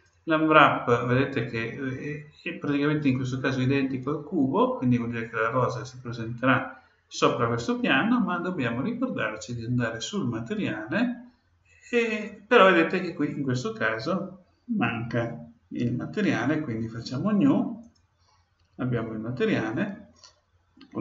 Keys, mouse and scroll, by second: 17.8-19.7 drag.